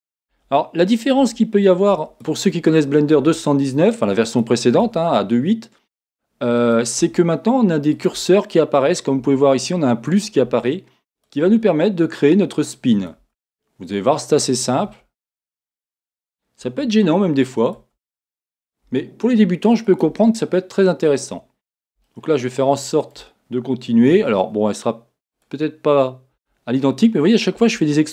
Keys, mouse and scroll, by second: 22.1-26.3 shift+middle drag, 24.1 e.